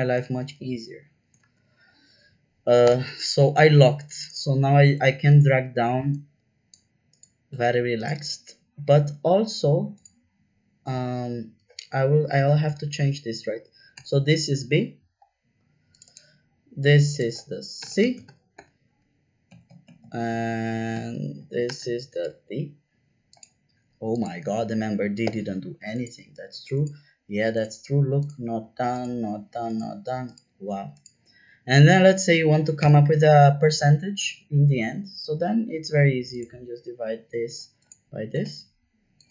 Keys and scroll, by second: 0.2 shift+4, 1.4 shift+4, 2.8 Return, 12.2 BackSpace, 12.5 shift+b, 13.9 Return, 17.8 shift+BackSpace, 18.0 shift+c, 18.2 Return, 18.5 Return, 19.5 Left, 19.6 Left, 19.8 Left, 20.0 Left, 21.6 BackSpace, 21.9 shift+d, 22.2 Return, 32.8 =, 37.4 /, 38.3 Return.